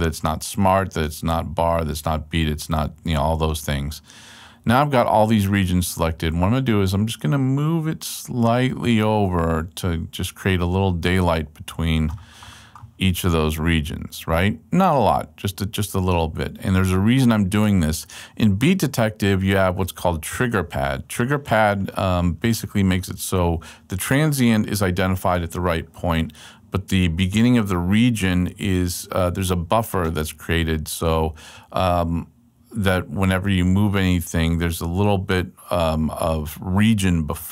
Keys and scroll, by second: 19.4 super+Left.